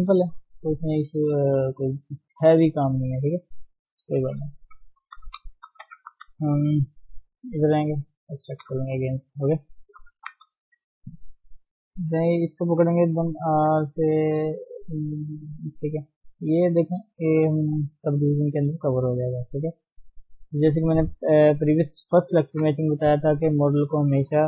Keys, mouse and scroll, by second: 0.2 scroll down 2, 0.5-1.9 middle drag, 1.9 scroll up 1, 2.1 Tab, 3.4 scroll up 1, 3.5 KP_1, 4.2 Tab, 5.5 shift+middle click, 5.8-6.1 scroll up 2, 6.1 scroll down 2, 6.4 shift+middle click, 6.8 Tab, 8.2 click, 8.6 scroll down 2, 8.9 shift+middle click, 9.0-9.3 scroll up 1, 9.3 shift+middle click, 10.1 scroll up 1, 10.2 Tab, 10.5 scroll down 1, 10.7 shift+z, 10.9 shift+middle click, 11.0-11.9 scroll up 1, 11.9 click, 13.2 r, 15.0-15.4 scroll up 1, 15.4 shift+middle click, 15.7-17.7 scroll up 1, 17.7 g, 19.5-20.0 scroll down 3, 20.2-20.8 scroll up 2, 21.0 shift+middle click, 21.5-21.8 scroll down 2, 21.8 shift+middle click, 21.9-22.5 scroll up 1, 22.5 KP_3, 22.8-24.4 scroll up 6, 23.3 shift+middle click, 23.8 shift+middle click.